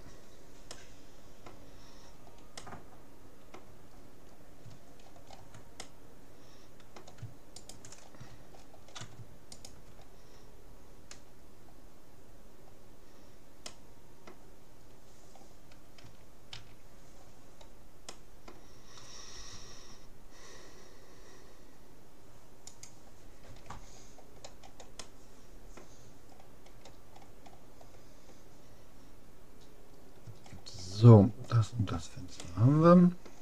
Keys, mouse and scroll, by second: 7.6-9.2 right drag, 8.6-10.0 middle drag, 9.6-11.4 right drag, 11.8-13.2 middle drag, 13.8-15.4 middle drag, 16.0 a, 16.6 a, 18.2-19.6 middle drag, 19.4 g, 23.6 a, 24.0-25.0 scroll up 1, 25.0-28.6 middle drag, 28.6-29.4 scroll up 1, 30.0-30.5 scroll down 1, 30.5-32.0 middle drag, 32.0-32.4 scroll up 1, 32.4-33.4 middle drag.